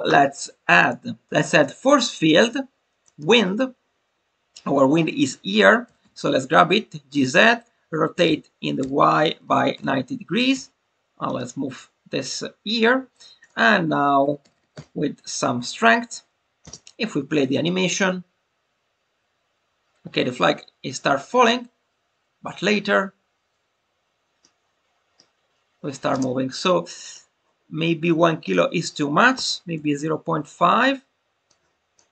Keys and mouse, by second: 0.8-3.1 drag, 7.1 click, 11.2 click, 13.5-15.5 drag, 17.1 space, 24.3-25.2 middle drag, 28.4-30.3 drag, 31.4-31.9 drag.